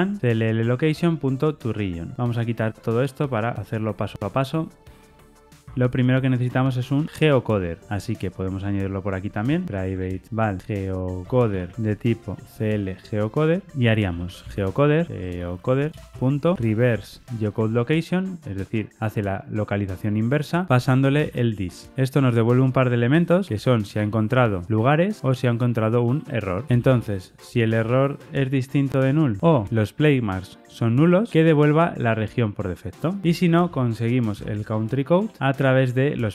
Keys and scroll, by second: 0.2 Tab, 5.6 Escape, 16.0 Return, 19.7 Return, 31.3 Tab, 33.2 Escape.